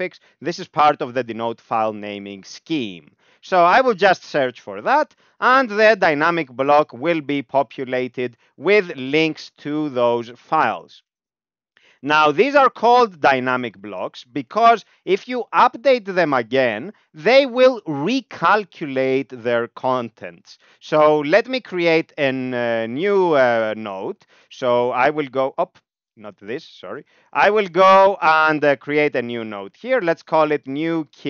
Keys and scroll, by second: 4.5 alt+x, 8.3 Down, 8.5 Down, 8.6 Down, 8.8 Down, 8.9 Down, 9.1 Down, 9.3 Up, 9.4 Up, 9.7 Up, 9.9 Up, 10.0 Up, 10.2 Up, 10.7 Down, 12.1 ctrl+s, 12.3 Down, 12.4 Down, 12.7 Down, 12.9 Down, 13.0 Down, 13.2 Down, 21.7 ctrl+v, 22.6 ctrl+g, 25.1 ., 29.8 typing.